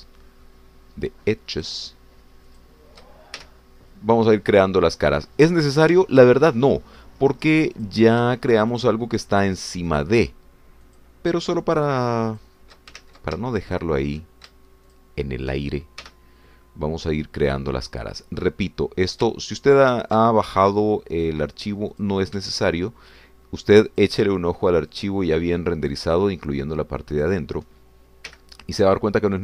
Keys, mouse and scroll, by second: 0.4 shift+click, 0.9 shift+middle click, 2.7 shift+click, 3.6 shift+click, 4.4 shift+f, 5.6-6.7 middle drag, 7.0-8.6 ctrl+middle drag, 8.9 ctrl+click, 9.7 shift+click, 10.9 shift+click, 11.8 shift+click, 13.3 shift+click, 14.3 ctrl+shift+z, 14.8 shift+click, 15.9 shift+click, 17.4 f, 19.5-21.9 middle drag, 21.9 ctrl+shift+scroll up 3, 23.1 click, 23.7 shift+click, 24.9 shift+click, 26.1 shift+click, 27.1 shift+click, 28.3 shift+click.